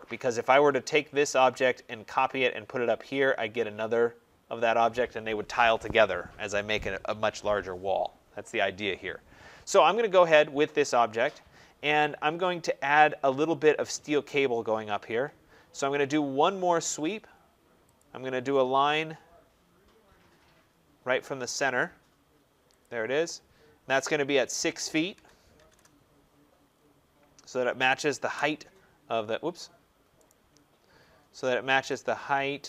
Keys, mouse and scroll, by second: 10.1 middle click, 10.2 middle click, 10.3-14.4 scroll, 17.9 click, 18.5-19.8 scroll, 20.1-20.5 scroll, 22.7 click, 23.1 scroll down 6, 25.0-25.6 typing, 26.2-28.1 scroll, 28.1 Return, 29.4 scroll, 30.2 right click, 30.4 scroll, 30.5 middle click, 30.6 middle click, 31.8 click, 32.3 Escape.